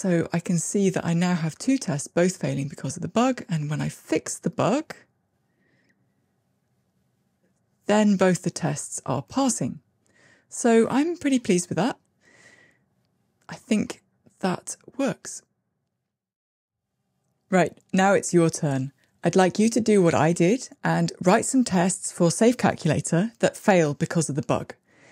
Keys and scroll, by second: 4.7 ctrl+r.